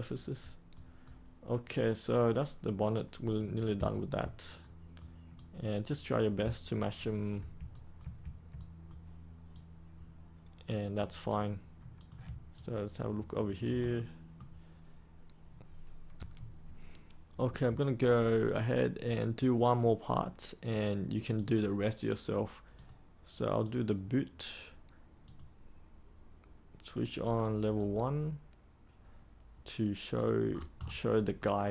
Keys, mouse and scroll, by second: 2.0-3.7 drag, 3.8 ctrl+right click, 5.3 click, 6.9 ctrl+right click, 7.7 ctrl+right click, 8.5 right click, 9.5-11.3 drag, 12.5 alt+click, 13.9-15.3 middle drag, 16.1 3, 19.0-20.6 drag, 30.4-31.3 scroll down 1, 31.3 middle click.